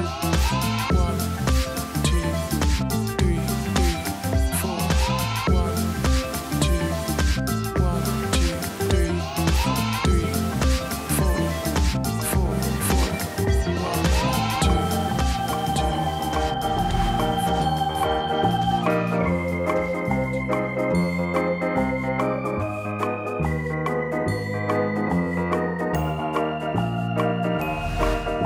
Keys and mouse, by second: 0.6 click, 2.8 click, 3.4 ctrl+click, 4.1 space, 4.2 click, 4.3 space, 5.3 click, 6.1 space, 6.1 click, 6.2 space, 6.4 click, 7.9 z, 10.5 ctrl+z, 11.8 click, 12.5 space, 12.6 click, 12.7 space, 13.0 click, 14.0 click, 15.8 click, 16.4 space, 16.4 click, 16.5 space, 16.8 click, 17.7 space, 17.8 click, 17.9 space, 18.2 click, 21.3 v, 21.9 click, 22.2 ctrl+-, 23.0 click, 23.5 space, 23.8 click, 23.9 p, 26.0 ctrl+click, 26.7 v, 27.2 click, 27.6 click, 27.7 p.